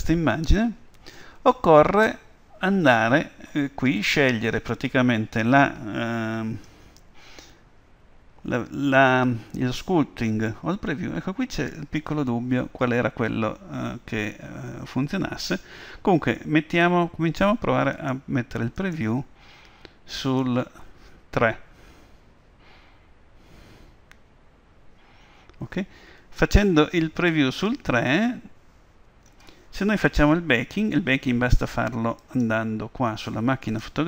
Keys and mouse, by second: 18.0-22.2 drag, 32.2-34.0 drag.